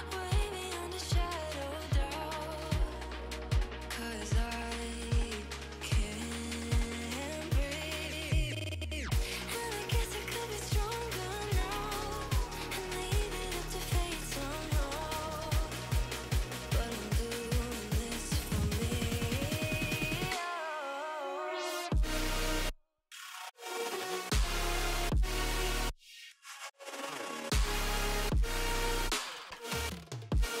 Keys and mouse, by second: 0.8 click, 1.4 space, 1.5 click, 1.8 click, 2.7 Up, 3.1 Up, 4.0 Up, 6.5 Down, 7.8 click, 8.8 click, 9.5 Down, 11.3 Up, 11.5 Down, 12.8 click, 13.1 click, 13.9 click, 18.4 click, 19.6 Down, 19.7 Down, 19.9 Down, 24.0 Up, 24.3 Up, 25.5 click, 28.1 click, 28.4 alt+click, 29.4 click, 29.8 click.